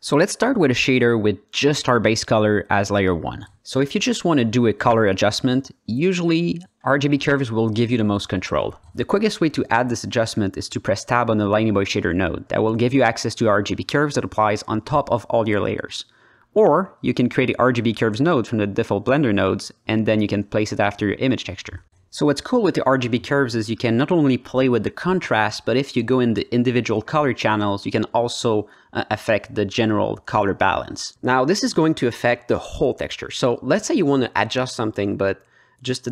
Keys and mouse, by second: 0.5 click, 1.2 shift+a, 4.4-4.8 drag, 5.5-6.1 drag, 9.5 alt+middle click, 9.9 drag, 10.8 Tab, 11.4-12.6 alt+middle drag, 14.3 click, 14.8 Tab, 15.3 middle click, 16.4 shift+a, 20.8 middle click, 21.6 click, 22.7-23.3 drag, 24.1 drag, 24.9 click, 25.5 ctrl+alt+middle click, 25.8 alt+middle click, 26.3 shift+middle click, 27.1 click, 27.7 drag, 28.1 click, 29.1 click, 30.7 click, 31.2 click, 32.0 drag, 32.4-32.9 drag, 33.6 click, 34.3 drag, 35.1 click, 35.9 click.